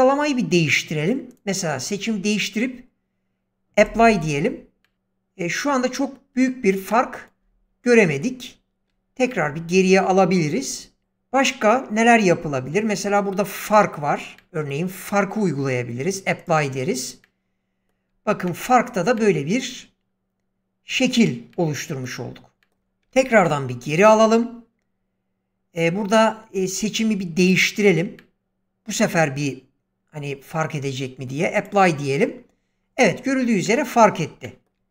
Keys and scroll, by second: 8.8 ctrl+z, 23.1 ctrl+z.